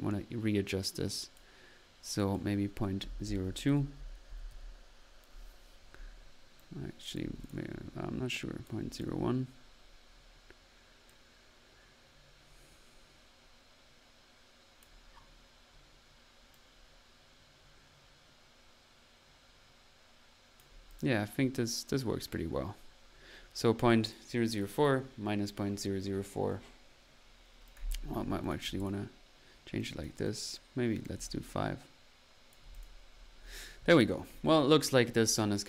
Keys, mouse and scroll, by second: 2.2 drag, 6.5 click, 8.3 click, 10.2 typing, 15.0 click, 15.4 middle click, 16.5-21.4 drag, 21.4-21.8 middle drag, 21.8 typing, 24.0 click, 27.6 drag, 29.8 click, 31.4-32.7 drag, 34.4 middle click.